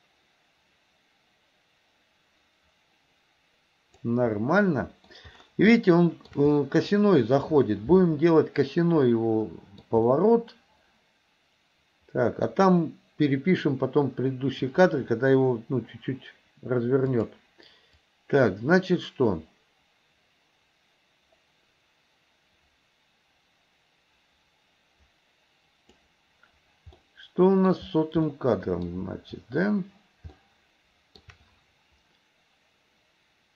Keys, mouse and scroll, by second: 4.4-5.1 middle drag, 5.8-6.3 shift+middle drag, 6.6 middle drag, 9.6 middle click, 10.1-12.5 middle drag, 17.2 click, 18.1-26.1 drag, 27.1 middle click, 27.5 middle click, 28.8 middle click, 30.5 shift+middle click.